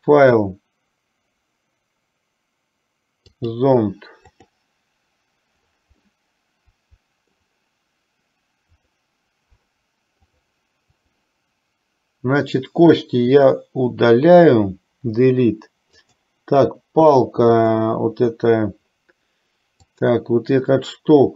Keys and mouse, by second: 0.0-4.8 drag, 6.3-7.5 middle drag, 8.8 click, 10.3-11.3 drag, 15.3 Delete, 16.0 click, 20.0 click.